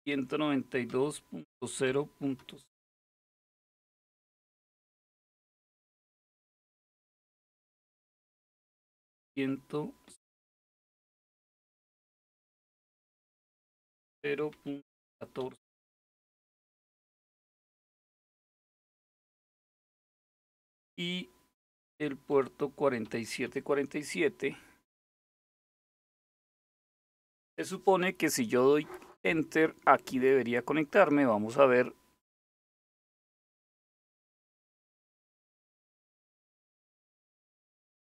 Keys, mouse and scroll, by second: 0.0-2.5 typing, 5.1-5.6 typing, 8.6-10.8 typing, 13.6-15.5 typing, 19.7 typing, 21.3-23.1 typing, 32.1 Return, 33.7 click, 37.8 click.